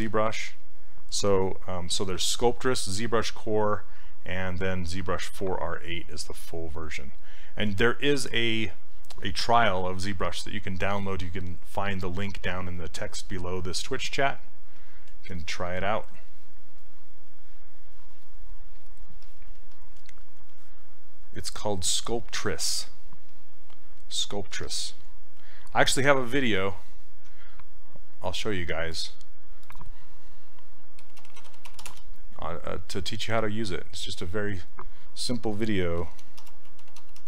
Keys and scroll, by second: 30.8-32.2 typing, 35.6-37.2 typing.